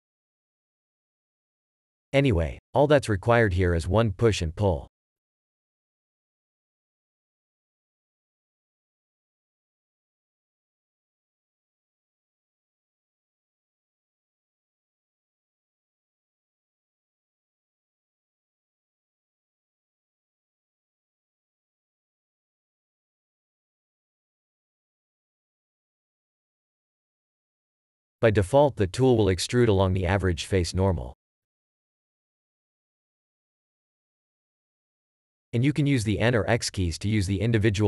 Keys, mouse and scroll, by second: 0.0 ctrl+w, 1.3 ctrl+w, 4.1 r, 4.6 w, 10.9 click, 12.5 3, 14.0 3, 22.3 Tab, 22.9 click, 23.3 ctrl+click, 24.7 f, 25.3 scroll down 1, 28.4 shift+e.